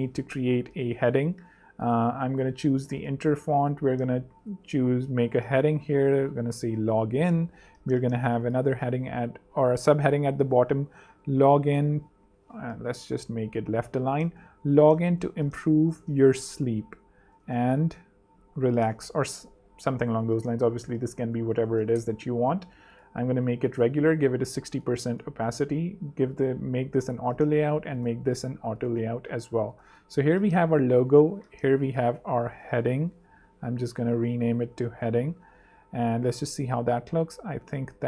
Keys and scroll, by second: 0.0-1.2 typing, 4.0-4.8 typing, 10.6-11.9 typing, 12.4 super+space, 12.4 super+z, 14.0-21.7 typing, 21.6 super+2, 21.9 Page_Up, 23.9 6, 24.9 shift+6, 25.3 shift+a, 26.8 Escape, 27.6 shift+Escape, 28.1 shift+a, 28.7 alt+shift+z, 29.2 alt+z, 30.2 super+r, 30.5-31.3 typing, 32.2 super+d, 32.5 shift+super+h, 32.9 shift+super+z, 33.9 super+r, 34.2-35.4 typing.